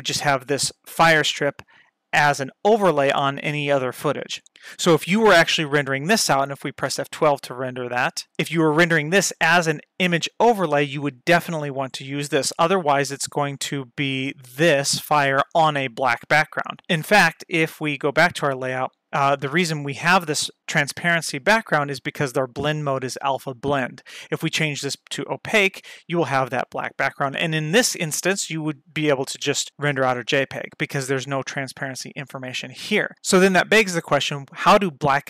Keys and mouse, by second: 6.9 F12, 18.0 click, 24.0-25.0 drag.